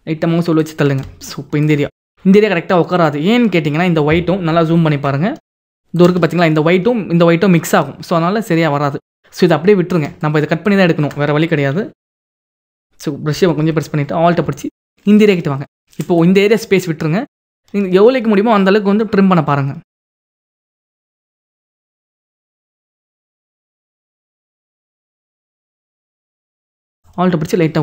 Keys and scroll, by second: 4.4 ctrl+=, 13.0 ].